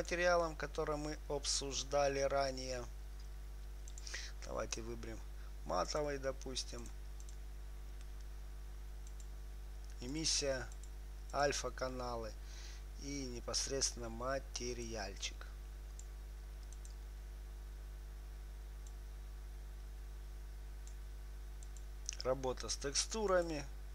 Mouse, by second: 0.3-2.9 drag, 6.2-8.0 drag, 9.4-13.3 drag, 15.2-16.9 drag, 17.2-18.8 drag, 19.4-21.3 drag, 22.0-23.9 drag.